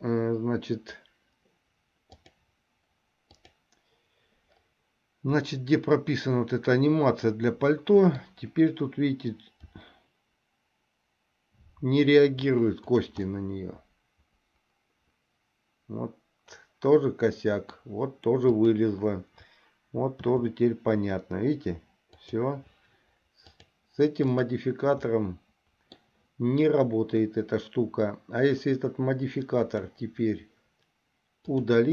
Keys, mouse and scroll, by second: 2.3 click, 3.5 click, 5.7-8.5 middle drag, 9.8 r, 13.5-17.9 middle drag, 20.4 r, 23.8 click, 25.4 middle click, 29.8 click, 31.7 click.